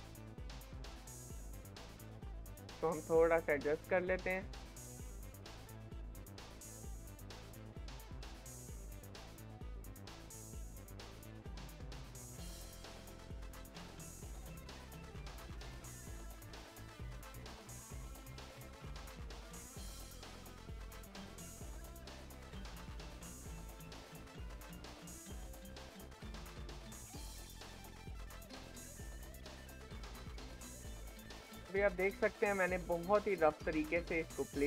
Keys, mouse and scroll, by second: 1.4 click, 2.0 g, 4.2 click, 4.6 e, 6.8 e, 8.8 e, 9.9 e, 11.7 e, 14.4-15.4 shift+middle drag, 15.4 r, 17.4 e, 18.9 e, 20.6 e, 21.8 e, 24.0 e, 24.9 e, 26.8 shift+middle click, 27.7 r, 29.9 e, 31.2 e, 33.7 shift+middle click, 34.5 r.